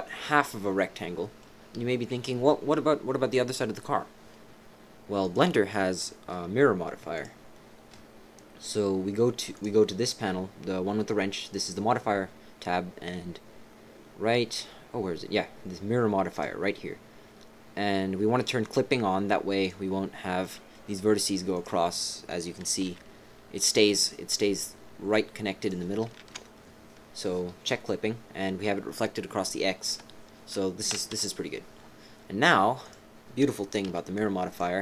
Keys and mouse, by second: 0.5 click, 2.5 right click, 5.2 click, 7.1-9.4 drag, 11.4-16.4 drag, 19.6 click, 20.4 click, 21.5 click, 22.8 g, 26.2 ctrl+z, 29.8 KP_3, 30.9 KP_1, 31.1 KP_1, 32.8 click, 33.8 b.